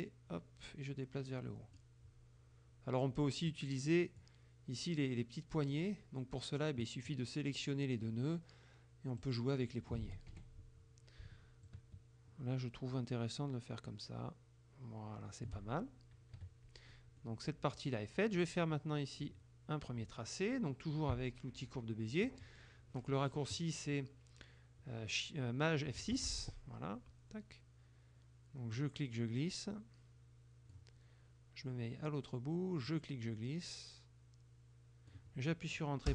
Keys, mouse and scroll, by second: 0.0-2.0 drag, 3.6 click, 7.2-8.3 drag, 9.3 click, 10.1 ctrl+z, 10.4 ctrl+F1, 11.7-15.7 shift+drag, 16.4 KP_Subtract, 17.0 middle click, 26.1 shift+F6, 28.8-31.0 drag, 32.9-35.4 drag.